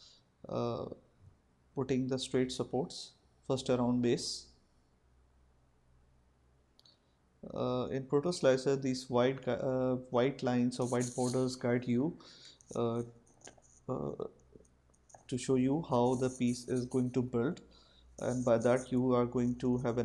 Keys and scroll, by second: 16.0 4, 17.5 Return.